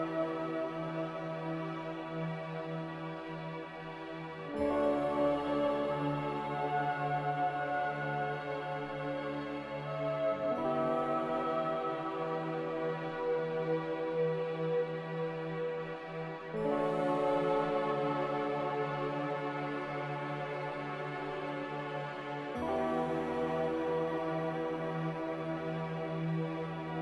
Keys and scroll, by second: 0.0 Escape, 0.3 Escape, 16.7 ctrl+b, 19.6 n.